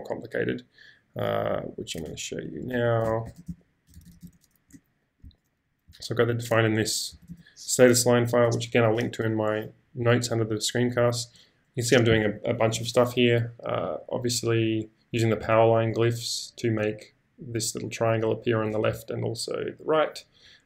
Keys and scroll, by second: 2.1-5.9 typing, 7.1 g, 10.4-13.3 typing.